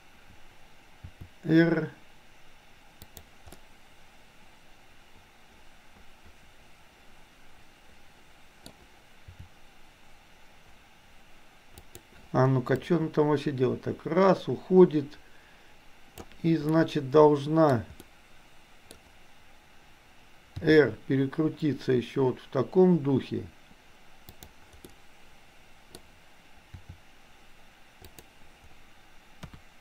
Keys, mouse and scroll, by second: 1.2 r, 3.6-8.7 middle drag, 9.4 r, 12.9-16.4 drag, 16.7-17.7 middle drag, 18.0-19.0 middle drag, 20.6 r, 24.9-26.0 middle drag, 26.7 r, 29.5 KP_1.